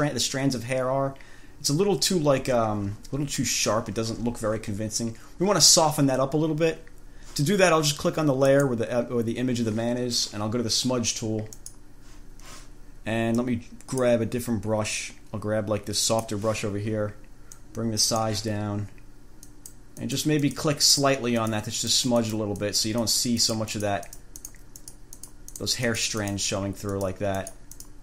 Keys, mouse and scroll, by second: 8.6 click, 11.8 click, 13.6 click, 16.2 click, 17.8 click, 19.7 click, 20.2 click, 21.1 click, 21.6 click, 22.0 click, 22.4 click, 25.0 click, 27.2 click, 27.6 click.